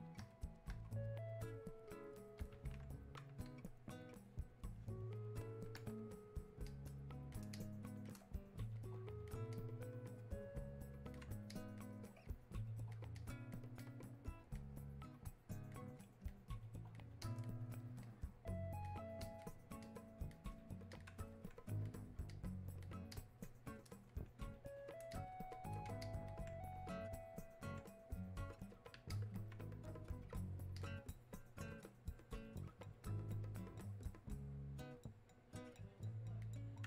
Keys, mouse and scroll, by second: 1.9-5.0 drag, 6.7 click, 7.6 click, 8.8-23.2 drag, 25.5 shift+click, 29.1-36.8 alt+drag.